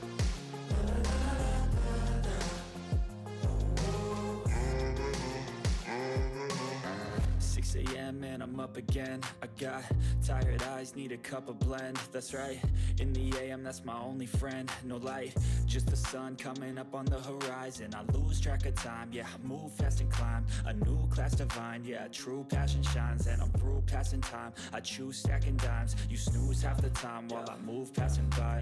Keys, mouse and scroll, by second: 0.8 click, 0.8 typing, 2.0 space, 4.5-5.2 typing, 6.1 click, 6.5 ctrl+s, 7.7 click, 9.4 click, 12.8 click, 13.2-13.6 scroll up 1, 14.6 space, 15.6-17.3 typing, 19.0-20.7 typing, 22.7 click, 23.6 scroll down 1, 25.4 scroll up 1, 26.2 click, 26.7-27.6 scroll up 1, 27.6 click.